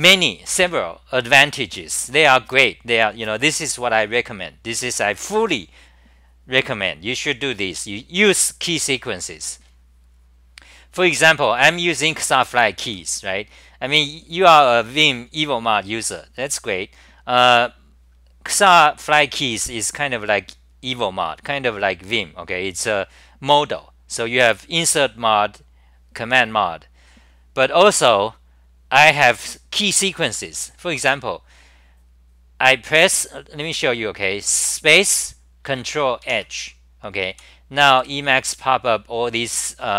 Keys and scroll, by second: 12.9 w, 36.3 h, 37.3 w, 38.0 3.